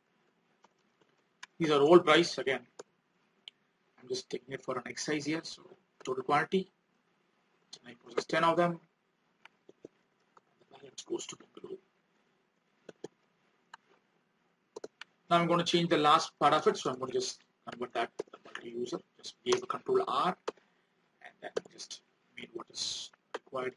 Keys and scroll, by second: 3.2 alt+Tab, 16.5 ctrl+r, 22.2 alt+Tab.